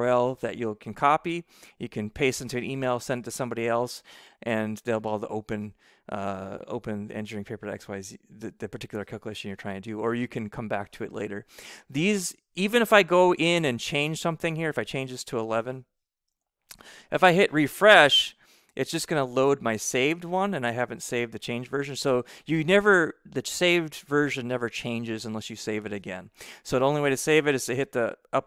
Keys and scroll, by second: 16.0 BackSpace, 16.2 1.